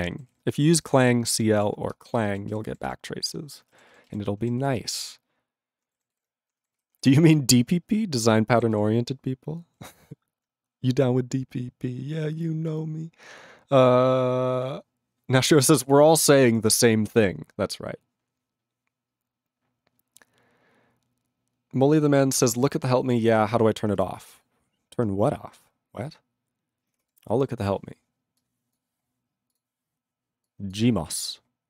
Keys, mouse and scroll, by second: 0.3 ctrl+s, 1.7 ctrl+s, 1.9 ctrl+space, 2.4 ctrl+alt+b, 2.5 ctrl+g, 2.8 ctrl+s, 3.9 ctrl+s, 4.0 ctrl+g, 4.6 ctrl+s, 6.1 ctrl+s, 6.7 ctrl+g, 6.7 ctrl+g, 7.1 ctrl+s, 8.7 ctrl+s, 9.9 ctrl+s, 23.2 ctrl+s.